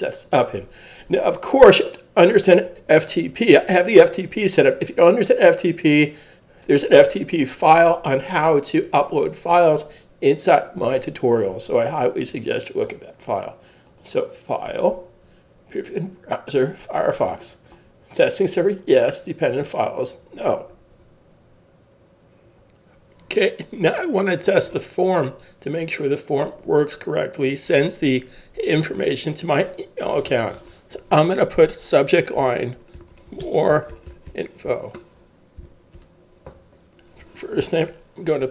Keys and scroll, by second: 32.2-34.8 typing, 35.6 Down, 36.0 Return, 36.5 Tab.